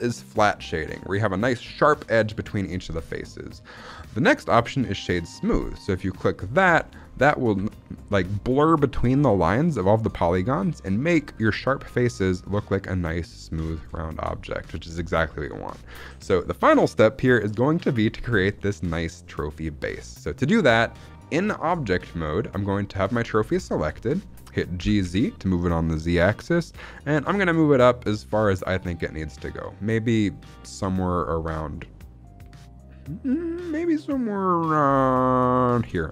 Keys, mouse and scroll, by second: 6.7 shift+middle click, 6.9-7.4 scroll up 2, 7.5 shift+middle drag, 8.1-8.6 shift+middle drag, 13.5-13.9 scroll down 3, 13.9 shift+middle drag, 14.2-14.6 scroll up 1, 14.6 shift+middle drag, 14.8 scroll down 2, 15.2 shift+middle click, 15.4-17.3 scroll up 1, 17.3-17.6 scroll up 1, 20.0 shift+middle drag, 23.6 shift+middle click, 24.7 g, 24.9 z, 35.6 click, 36.0 scroll down 2.